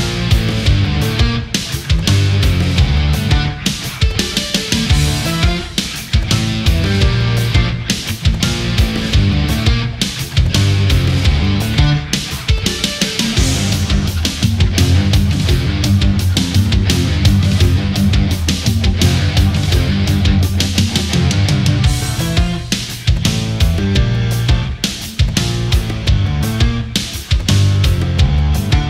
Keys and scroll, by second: 9.1 space, 13.2 space, 14.7 ctrl+z, 18.4 space, 19.4 ctrl+0, 21.0 ctrl+=, 21.4 space, 26.7 ctrl+z.